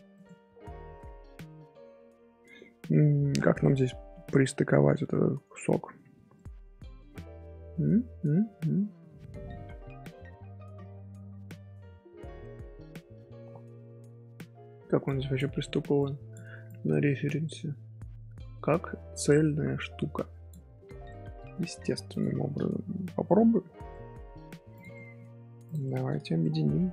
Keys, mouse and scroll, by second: 0.5 ctrl+z, 1.6 Tab, 6.3-9.3 middle drag, 9.5 middle click, 10.4 Tab, 11.1 Tab, 21.0-22.1 middle drag, 22.1 shift+click, 22.9 shift+h, 23.2 scroll down 1, 23.2-24.2 middle drag, 24.2-24.7 scroll up 2, 24.7 click, 24.9 middle drag, 25.2 scroll down 1, 25.6 click, 25.8 shift+middle drag, 26.1 scroll up 1, 26.4-26.9 middle drag.